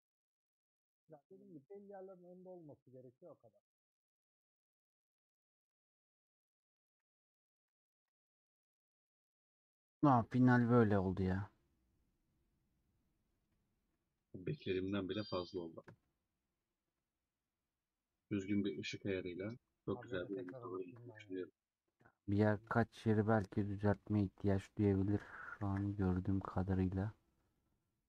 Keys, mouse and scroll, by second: 5.6 scroll down 2, 5.7-6.9 middle drag, 6.9 a, 7.6 ctrl+s, 7.8 ctrl+s, 8.6 middle click, 9.2 click, 9.5-10.6 middle drag, 10.6 scroll up 1, 11.0-20.2 middle drag, 20.3 a, 20.7-23.7 middle drag, 24.9-25.3 scroll up 1, 25.5 ctrl+s, 25.7 ctrl+s, 25.9 middle click, 26.6-27.0 scroll down 2.